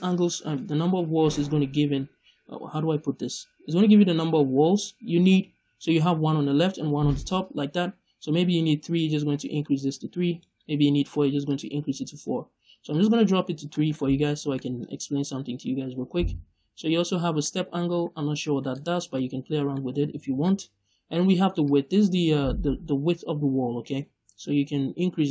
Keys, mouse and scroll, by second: 8.9 click, 9.6 middle click, 11.4 click, 12.8 click, 13.6 middle click, 13.9-14.4 scroll up 1, 14.4 middle click, 17.3-18.6 drag, 18.6 right click, 19.6 middle click, 21.5-25.3 drag.